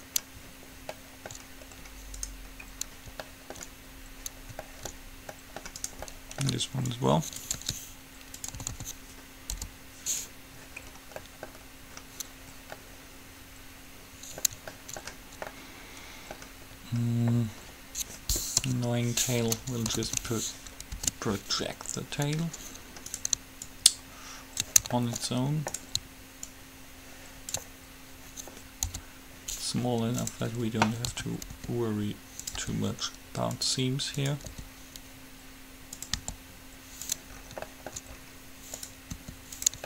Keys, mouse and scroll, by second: 2.4-4.3 right drag, 4.3-6.0 middle drag, 6.0 right click, 7.8 ctrl+e, 8.8 a, 8.9 a, 9.8 u, 13.1-15.1 middle drag, 18.8 KP_7, 20.1 a, 20.3 a, 21.3 alt+h, 23.3-25.1 right drag, 23.8-25.7 drag, 25.3 middle click, 25.3 right click, 26.0-27.8 right drag, 26.6-28.6 drag, 26.6 middle click, 29.0 u, 31.3 a, 31.8 r, 32.8 g, 34.3-36.2 drag, 34.8 r, 36.3 g, 39.0-39.8 drag, 39.3 r.